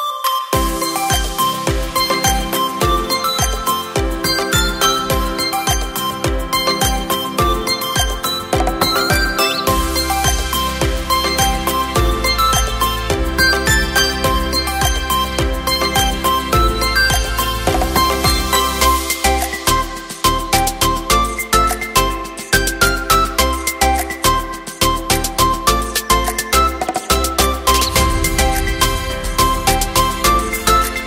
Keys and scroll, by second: 24.3 Up, 27.7 ctrl+t.